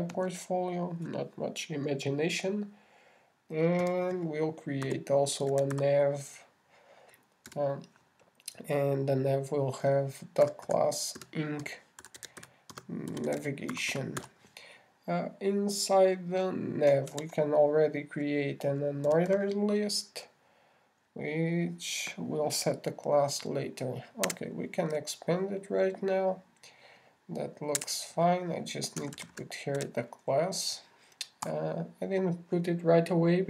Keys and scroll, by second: 18.5 shift+<.